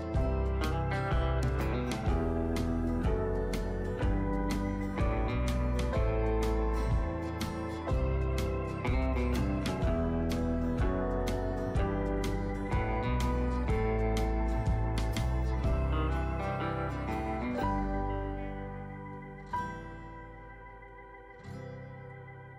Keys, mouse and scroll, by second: 10.0-22.5 drag.